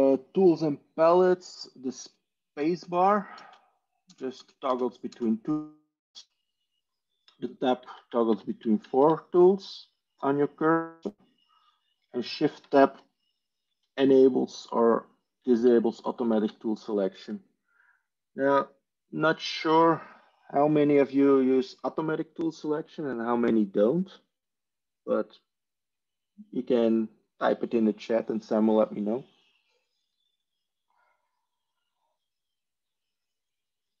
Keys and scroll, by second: 2.5-5.0 typing, 6.2 space, 7.3 Tab, 7.7 Tab, 7.9 Tab, 8.2 Tab, 8.5 Tab, 8.7 Tab, 8.9 Tab, 13.8 shift+Tab, 15.6 shift+Tab, 16.2 shift+Tab.